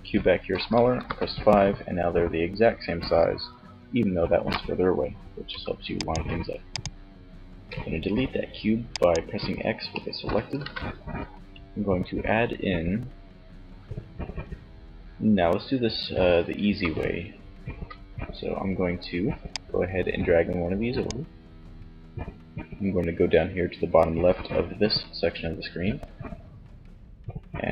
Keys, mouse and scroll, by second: 0.0 KP_5, 3.3-4.6 right drag, 4.6 x, 5.7-7.6 right drag, 6.8 x, 9.8 shift+a, 15.6 n, 16.7 n, 18.4-19.9 drag.